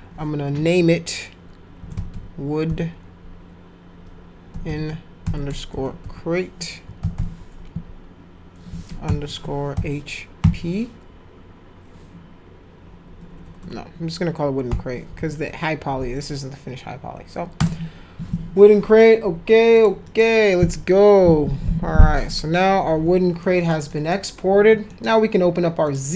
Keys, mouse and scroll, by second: 1.5-2.6 typing, 4.3-7.6 typing, 9.0 shift+-, 9.7 shift+h, 10.4 shift+p, 13.0 BackSpace, 13.2 BackSpace, 13.4 BackSpace, 13.6 BackSpace, 14.6 w, 15.0 BackSpace, 15.2 e, 19.8 click, 20.0 click, 23.4 middle click, 23.9 middle click, 24.9 middle click, 25.9 click.